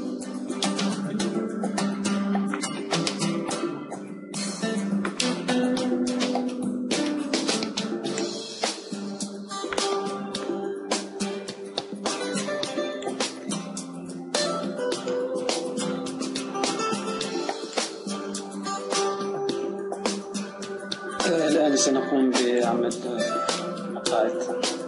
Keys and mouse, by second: 0.2-2.5 right drag, 2.5-4.5 middle drag, 4.5 shift+d, 8.5-9.7 drag, 9.7 middle click, 9.8-11.3 drag, 11.3 middle click, 13.5-14.8 drag, 14.8 middle click, 15.0 click, 15.4-18.0 middle drag, 18.0-24.8 drag.